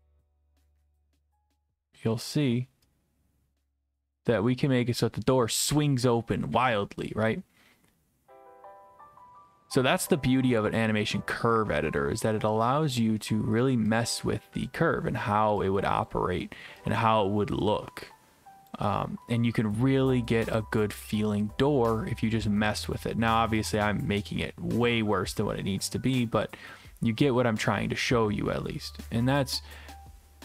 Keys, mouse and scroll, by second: 1.7-2.7 drag, 9.4-10.5 drag, 11.5-12.5 scroll up 1, 12.5-12.9 scroll up 1, 12.9-14.0 drag, 14.7 click, 18.7 click, 22.8 click, 29.7 click.